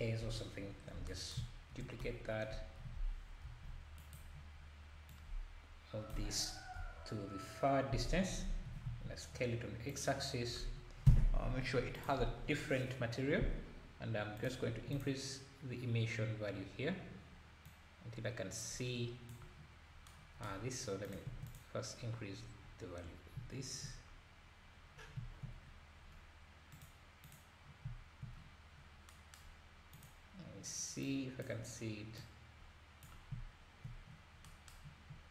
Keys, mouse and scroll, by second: 0.2 KP_7, 1.8 shift+d, 5.1 click, 6.7 KP_0, 8.0-8.4 scroll down 2, 8.6 scroll down 1, 8.6 s, 10.7 scroll down 1, 11.9-15.0 drag, 17.6 click, 21.0 click, 25.0 scroll down 1, 25.6-26.0 scroll down 1, 26.8 scroll down 2, 26.8 click, 27.3 click, 28.8 scroll down 3, 29.9 click, 31.1 click.